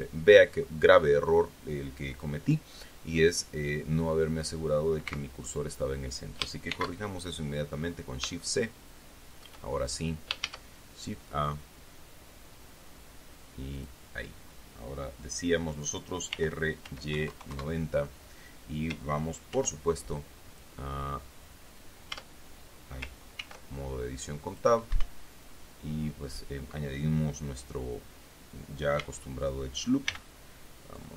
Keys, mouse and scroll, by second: 5.4 x, 5.8 click, 7.1 shift+c, 8.1-8.6 scroll up 2, 8.8-10.0 shift+middle drag, 10.8 shift+a, 14.1 click, 16.7 r, 17.2 y, 17.5 KP_9, 17.6 KP_0, 17.9 KP_Enter, 19.9 ctrl+r, 22.5 Tab, 23.7 ctrl+r, 24.8 click, 25.3 Escape, 29.3 a, 30.4 b.